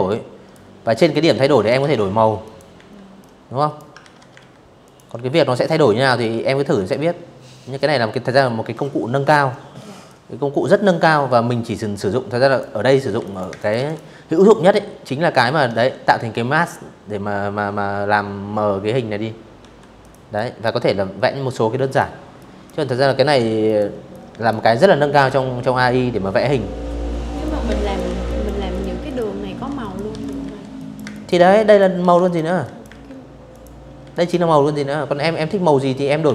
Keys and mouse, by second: 0.1 click, 0.4 a, 0.8-1.4 drag, 1.6 ctrl+z, 2.0 a, 2.5 click, 3.8-4.6 drag, 5.4 click, 7.7-10.2 drag, 10.8 z, 10.9 click, 11.2 space, 11.3 click, 11.4 v, 11.5 click, 17.3 v, 17.7 click, 18.0 click, 19.5 click, 20.0 click, 21.3 click, 21.8 click, 25.0 click, 25.3-31.7 typing, 25.5 click, 25.9 click, 26.3 click, 26.7 click, 27.5 click, 27.8 click, 28.4 click, 28.8 click, 29.2 click, 29.9 click, 30.3 click, 31.2 click, 31.8 click, 33.9 u, 35.2 click, 35.7 v, 36.1 click.